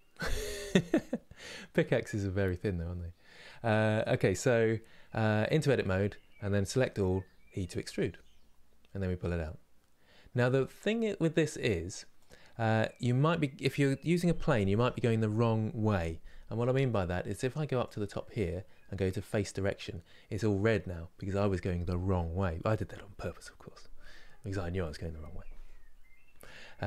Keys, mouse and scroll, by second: 1.1-3.2 scroll up 1, 3.2-5.3 middle drag, 5.3 Tab, 6.4 a, 19.5-26.8 drag.